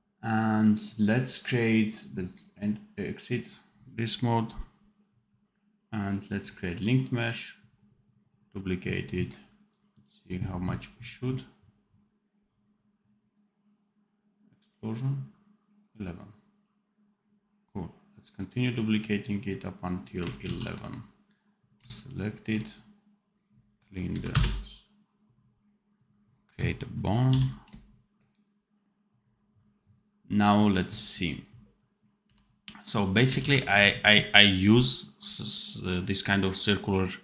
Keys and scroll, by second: 20.4 ctrl+z, 27.2 n, 32.1 v, 33.3 ctrl+s.